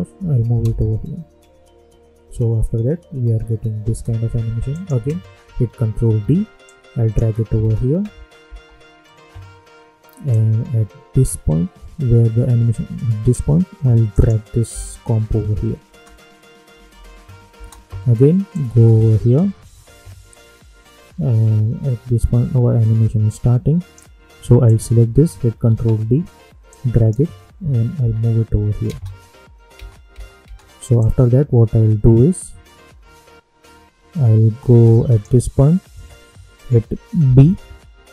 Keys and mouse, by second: 0.1 [, 0.6 space, 3.8 space, 4.7 click, 5.9 ctrl+d, 6.6 click, 7.6 space, 10.3-14.1 drag, 14.6 [, 15.8 space, 18.5-24.6 drag, 25.6 ctrl+d, 26.6-28.0 drag, 28.0 [, 28.8 space, 30.9-37.2 drag, 37.2 b.